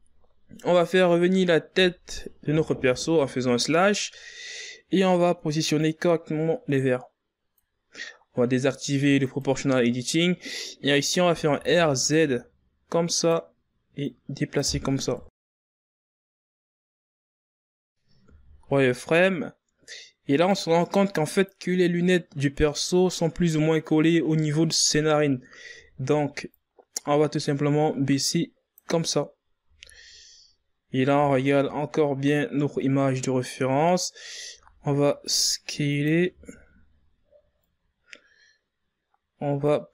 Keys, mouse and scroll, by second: 0.0 scroll down 4, 0.2-1.9 middle drag, 1.9 KP_1, 5.6 KP_Divide, 7.0-8.6 middle drag, 8.6-11.6 drag, 12.0 click, 14.1 r, 16.8-17.9 drag, 17.9 KP_1, 18.5-18.8 shift+scroll up 1, 19.1 KP_3, 19.9 click, 20.2 KP_1, 21.1 z, 21.6 scroll up 3, 23.4-26.4 drag, 28.6 z, 29.3-31.9 drag, 31.9 scroll down 4, 32.5 z, 32.8 scroll up 4, 34.1-34.5 shift+scroll up 5, 37.3 s, 39.1 z.